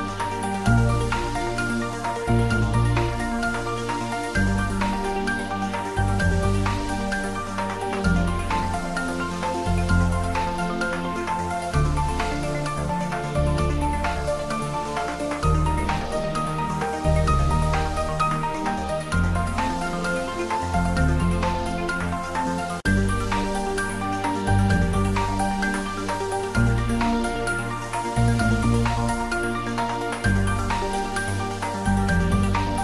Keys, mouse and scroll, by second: 2.8 click, 6.1 click, 7.3 3, 8.0 scroll down 1, 8.3 middle click, 8.9 click, 11.4 click, 15.4 click, 18.1-22.2 drag, 22.2 scroll down 1, 22.6-32.0 middle drag, 32.0 scroll down 1, 32.7 click.